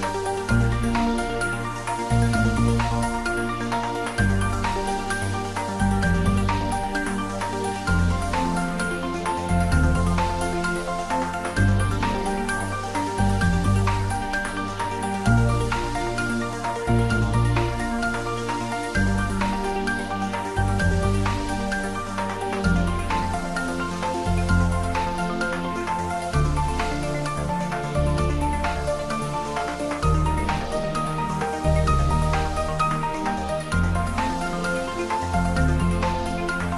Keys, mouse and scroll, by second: 0.6 click, 0.9 ctrl+z, 1.0 middle click, 1.4 ctrl+z, 1.8 middle click, 2.1-2.6 scroll down 1, 2.6 click, 2.8-3.2 scroll up 1, 3.3 ctrl+r, 7.8 click, 10.1 click, 10.6 middle click, 11.6 click, 11.9 scroll up 1, 12.8 middle click, 13.4 click, 14.0 g, 14.2 y, 14.6 x, 15.9 click, 16.3 ctrl+b, 17.1 click, 17.4 Tab, 17.7 scroll down 1, 17.8 middle click, 18.3-18.7 scroll up 1, 19.0 Tab, 19.4 ctrl+r, 19.7 click, 20.2 ctrl+z, 20.5 click, 20.7 middle click, 21.8 shift+click, 22.4-23.1 scroll down 2, 23.1 middle click, 23.6 ctrl+b, 25.6-26.5 scroll up 2, 26.5 click, 26.8 middle click, 27.9 scroll down 1, 28.1 middle click, 28.4 scroll up 1, 29.1 click, 29.6-30.1 scroll up 1, 30.1 g, 30.3 x, 30.9 click, 31.1 ctrl+b, 31.8 click, 32.0 Tab, 32.3 scroll down 1, 33.1 Tab, 33.6 click, 34.4 ctrl+b, 35.1 click, 35.4 Tab, 35.6-35.9 scroll down 1, 35.9 middle click.